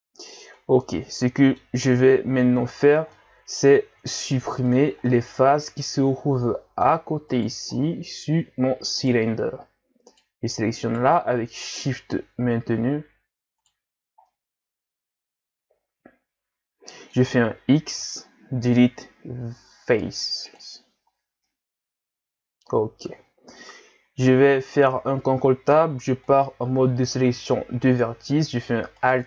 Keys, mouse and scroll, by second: 0.5-2.4 middle drag, 2.4-3.1 scroll up 3, 3.1 middle click, 3.9 ctrl+Tab, 5.1-7.3 middle drag, 7.3 right click, 7.8-9.0 middle drag, 9.0 shift+right click, 10.1 shift+right click, 10.9 shift+right click, 11.7 shift+right click, 13.6 shift+right click, 14.0 scroll down 2, 14.3-17.3 middle drag, 18.0 x, 21.5-24.5 middle drag, 24.9 ctrl+Tab, 27.5-29.0 middle drag, 29.0 alt+right click.